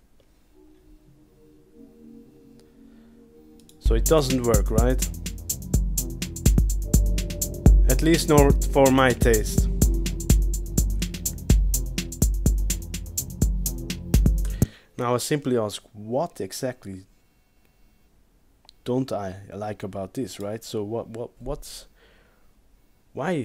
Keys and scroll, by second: 0.0 space, 14.6 space.